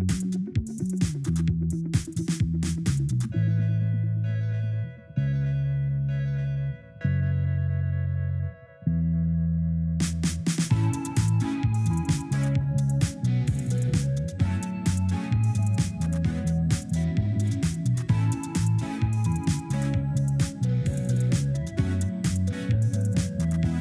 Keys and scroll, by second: 23.2 ctrl+z.